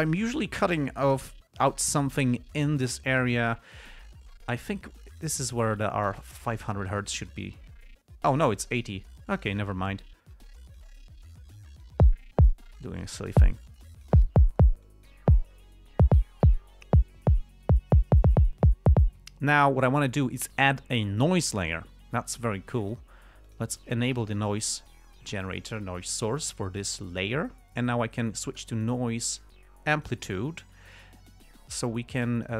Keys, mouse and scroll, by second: 3.5 click, 7.6 click, 9.7 click, 10.7 click, 11.7-12.4 drag, 13.0 click, 14.2 click, 15.2 click, 23.8 click, 29.1 click, 30.3 click, 32.2 click.